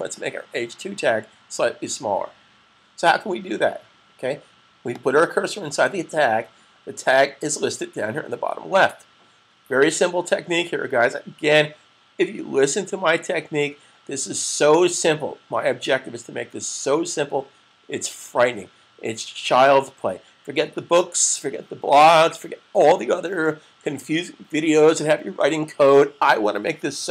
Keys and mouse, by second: 5.0 click.